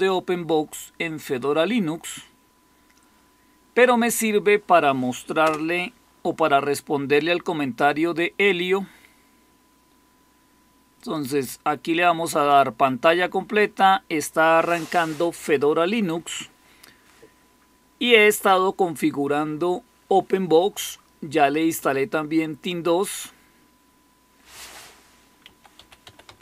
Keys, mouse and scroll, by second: 5.3 Return, 25.1-26.4 typing.